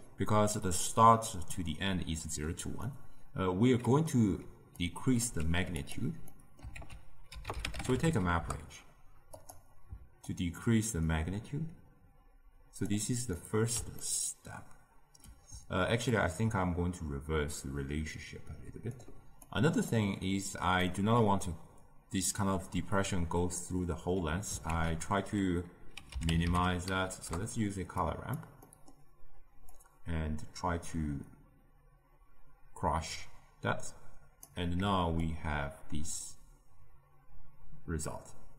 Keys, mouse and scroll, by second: 2.8-4.7 middle drag, 4.7-5.3 drag, 5.3 g, 6.2 middle click, 6.7 ctrl+a, 10.2-13.3 shift+drag, 13.3-16.1 middle drag, 16.1-19.2 shift+drag, 19.4-20.7 drag, 20.7-23.8 middle drag, 24.6 ctrl+a, 28.7-29.7 middle drag, 29.7-32.7 drag, 35.2-38.3 shift+drag.